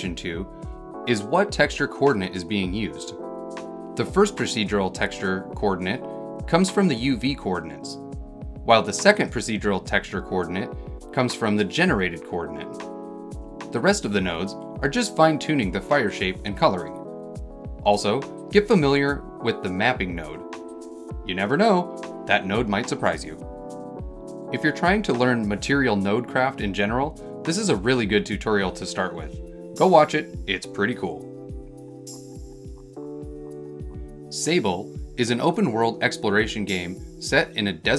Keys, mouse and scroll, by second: 24.8 Num_Lock, 24.8-30.2 middle drag, 30.0 click.